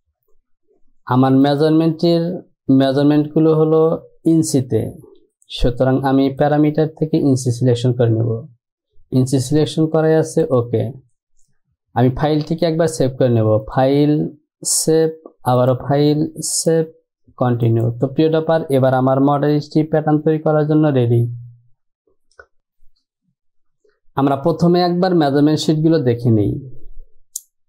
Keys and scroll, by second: 19.6 Home.